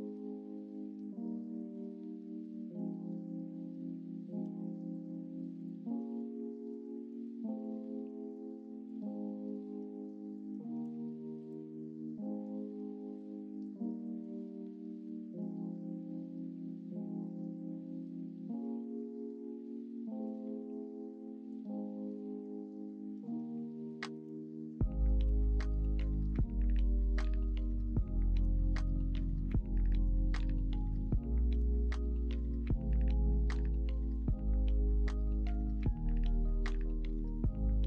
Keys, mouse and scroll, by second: 5.8 x, 6.9 ctrl+z, 7.4 x, 9.9 1, 11.0 ctrl+b, 24.1 ctrl+z, 25.2 2, 30.7 ctrl+z, 33.4-37.8 drag.